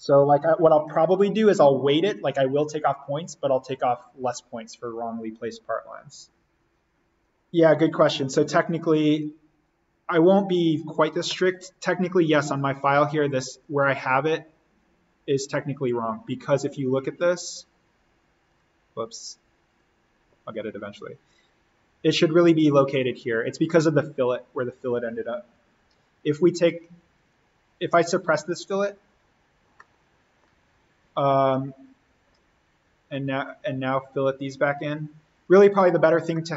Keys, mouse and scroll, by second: 0.9 click, 7.2 click, 11.0 click, 13.5 click, 20.6-22.3 scroll down 1, 23.5 scroll up 1, 23.6-27.1 middle drag, 27.1 click, 29.6 scroll up 1, 29.7-32.9 middle drag, 33.3 click, 36.1 scroll down 1, 36.3-36.5 middle drag.